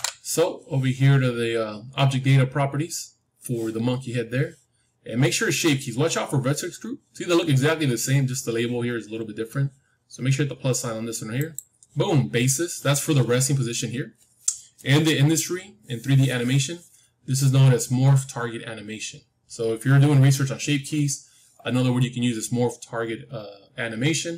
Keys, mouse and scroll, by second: 11.3-14.7 drag.